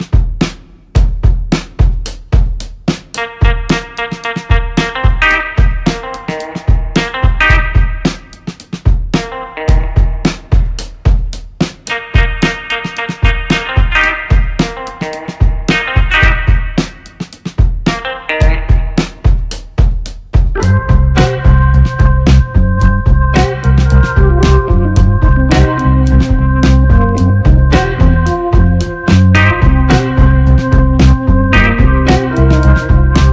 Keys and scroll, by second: 3.2-6.0 typing, 7.0-8.1 typing, 9.5 ctrl+c, 9.7 ctrl+v, 13.5 e, 13.6 m, 13.8 i, 14.0 l, 16.6-24.6 typing, 19.9 ctrl+a.